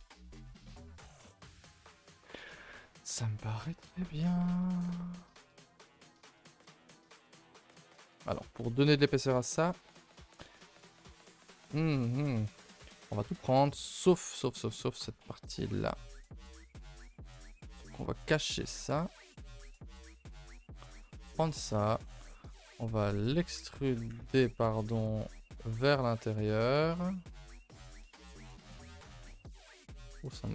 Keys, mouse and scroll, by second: 0.6 click, 0.8 g, 1.5 Tab, 1.7 a, 1.9 a, 2.1 ctrl+s, 2.2-2.6 scroll down 4, 2.6-3.1 shift+middle drag, 3.1 scroll down 1, 3.5 shift+middle click, 3.7 scroll up 4, 3.9 a, 4.0 a, 4.3 ctrl+s, 4.5 click, 5.5 click, 5.8 shift+middle drag, 6.0 scroll up 3, 6.3 Tab, 6.5-8.4 typing, 7.0-7.4 shift+middle drag, 7.4 scroll up 2, 8.0 shift+middle click, 8.1-8.4 scroll up 4, 8.6 middle click, 8.8-9.8 scroll up 4, 9.1 shift+middle click, 9.8 middle click, 10.1 Tab, 10.9 ctrl+i, 11.1 h, 11.4 Tab, 11.9 shift+middle click, 12.1-12.6 scroll up 2, 12.6-15.0 shift+middle drag, 15.0 alt+click, 15.5 middle click, 16.1 alt+click, 16.5-18.8 middle drag, 18.8 h, 19.5 l, 19.9 h, 20.8 l, 21.2 scroll down 2, 21.4 shift+middle click, 21.7-23.2 scroll up 2, 23.2 e, 24.2 ctrl+z, 25.0 t, 26.0-28.0 drag.